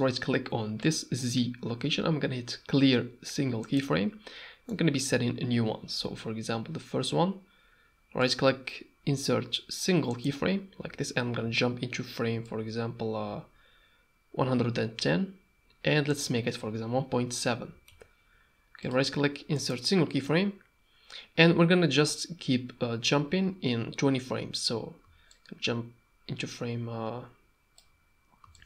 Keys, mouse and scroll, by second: 0.9-3.8 drag, 4.7 middle click, 8.3-10.2 drag, 12.4-15.0 shift+drag, 16.3-18.9 drag, 18.9 middle click, 25.3-27.8 shift+drag, 28.5-28.6 shift+drag.